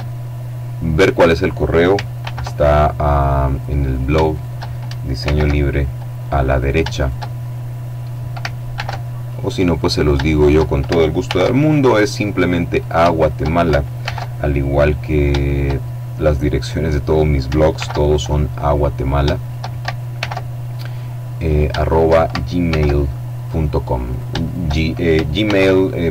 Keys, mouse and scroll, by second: 1.6 alt+m, 2.5 click, 3.3 shift+right click, 4.6 alt+m, 5.1 alt+click, 6.0 shift+right click, 8.1 alt+m, 8.7 alt+click, 9.3 shift+right click, 10.7 alt+m, 11.1 alt+click, 12.1 shift+right click, 13.4 alt+m, 13.8 alt+click, 14.5 right click, 14.7 shift+click, 17.1 alt+m, 17.6 alt+click, 18.4 shift+right click, 19.6 alt+m, 20.1 alt+click, 20.9 shift+right click, 22.1 alt+m, 22.8 click, 23.5 shift+right click, 24.8 alt+m, 25.4 alt+click.